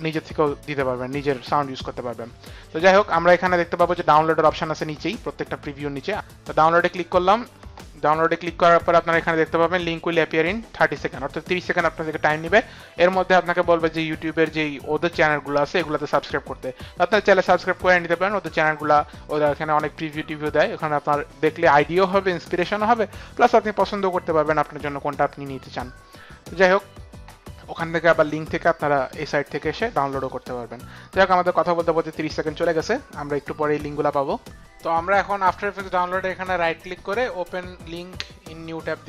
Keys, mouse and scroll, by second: 2.9 click, 6.1 click, 6.6 click, 7.8 middle click, 36.4 right click, 38.5 click.